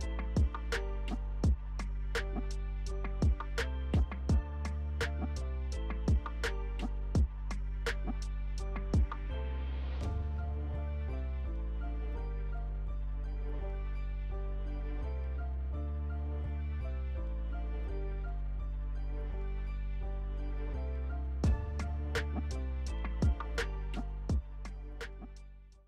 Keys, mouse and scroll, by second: 0.7 alt+click, 2.4-2.7 alt+scroll up 1, 4.1 alt+click, 5.1-6.0 alt+scroll down 1, 6.0 alt+click, 6.4-6.8 alt+scroll down 1, 7.2-7.6 alt+scroll up 1, 8.0 alt+click, 8.4-8.8 alt+scroll up 1, 9.7 alt+click, 12.2-12.8 alt+scroll down 1, 13.4 alt+click, 14.0 alt+scroll down 1, 15.4 alt+click, 15.9-16.4 alt+scroll down 1, 16.4-18.1 alt+drag, 18.1 ctrl+alt+g, 19.3 alt+p, 21.5 alt+click, 22.6 alt+F4, 25.6 alt+`.